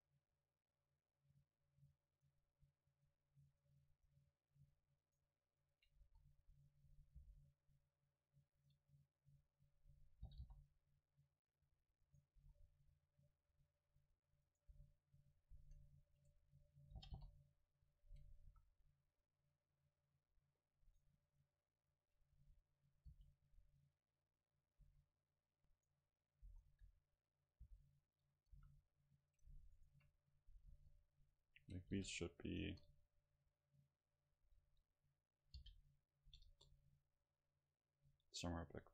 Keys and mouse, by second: 2.1-7.5 right drag, 6.0 s, 7.2-9.2 drag, 7.2 g, 10.3 g, 12.1-15.1 right drag, 12.4 s, 13.8-15.1 drag, 14.7 s, 17.0 g, 17.4 right click, 18.0-20.2 drag, 18.5 a, 20.9-23.7 right drag, 22.4 s, 23.1 g, 24.8-26.7 drag, 24.8 a, 25.8-27.2 right drag, 26.5 s, 27.7 g, 28.3-30.0 drag, 28.6 a, 29.4 right click, 30.8 KP_7, 32.0 g, 32.7 click, 32.7 KP_0, 34.7 KP_7, 35.7 g, 36.3-38.1 drag, 36.5 KP_0, 38.8-38.9 middle drag.